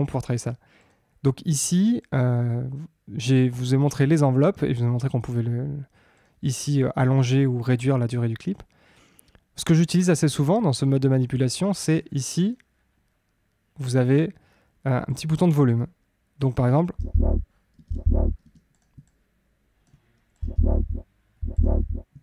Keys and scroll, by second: 16.9 space, 20.4 space.